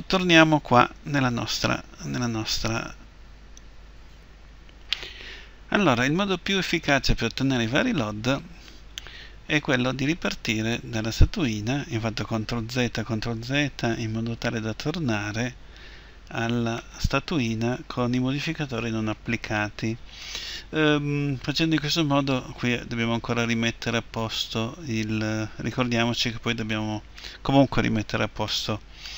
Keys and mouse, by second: 1.5-4.2 middle drag, 16.9-18.5 middle drag, 23.4 Tab, 25.3 Tab, 28.7-29.1 middle drag.